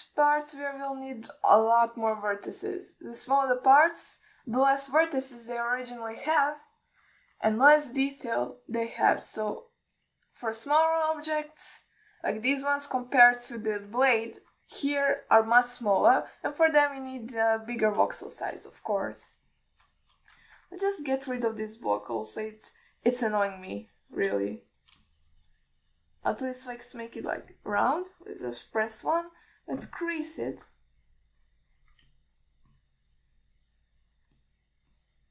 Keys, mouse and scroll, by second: 0.0 ctrl+alt+middle drag, 0.7 alt+middle click, 2.1-2.5 ctrl+alt+middle drag, 2.8-3.2 middle drag, 3.5 alt+shift+middle click, 4.2-6.0 shift+drag, 6.7-8.0 middle drag, 8.7 alt+middle drag, 9.5-10.2 shift+drag, 11.4 click, 14.3 ctrl+alt+middle click, 14.9 ctrl+alt+middle click, 15.4 alt+shift+middle drag, 16.7-17.0 alt+shift+middle drag, 17.4-17.7 ctrl+alt+middle drag, 18.5 click, 19.4-19.9 shift+middle drag, 20.3 ctrl+alt+middle drag, 20.8 alt+middle click, 21.2 alt+shift+middle click, 21.7 ctrl+alt+middle click, 22.0-22.4 middle drag, 22.7-25.5 shift+drag, 25.7 alt+middle drag, 26.3-28.6 shift+drag, 28.8-29.2 middle drag, 29.7 KP_1, 30.5 click, 33.3 alt+middle click, 34.0-35.3 drag.